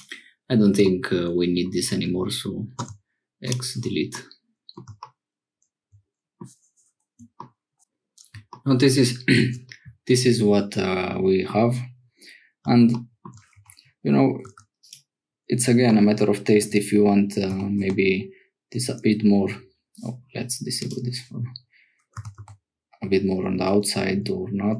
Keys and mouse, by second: 0.9 middle click, 2.8 x, 4.2 middle click, 5.0-6.3 middle drag, 9.6-11.5 middle drag, 13.5 Tab, 14.4 3, 14.8 click, 16.5 shift+click, 17.5 g, 20.8 click, 22.2 g.